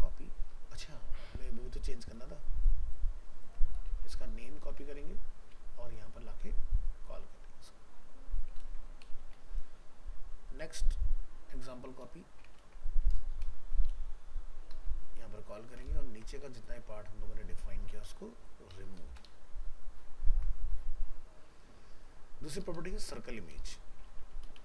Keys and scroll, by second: 3.8 alt+f, 3.9 alt+秄, 4.5 ctrl+c, 8.6 ctrl+v, 12.6 ctrl+c, 13.9 ctrl+v, 16.1 ctrl+shift+End, 20.3 ctrl+s, 23.6 shift+Right.